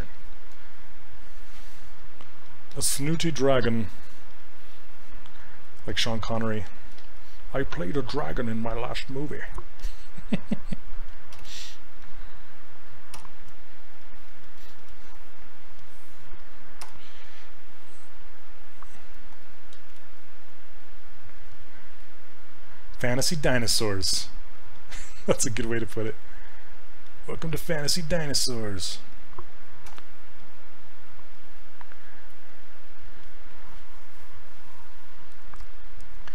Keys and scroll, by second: 11.4 shift+f, 13.2 r, 16.9 r, 19.8 ctrl+z, 29.9 w.